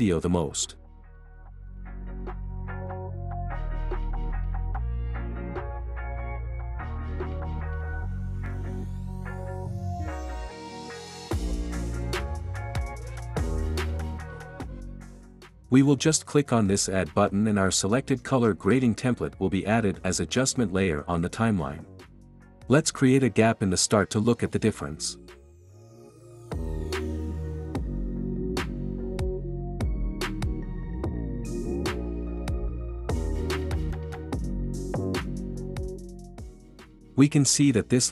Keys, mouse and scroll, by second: 4.1 click, 5.5 click, 6.5 click, 8.3 click, 11.3 click, 16.4-17.4 drag, 20.1 click, 23.9 click, 25.1-26.6 drag, 26.8 space, 29.1 space, 30.6 click, 33.3 click.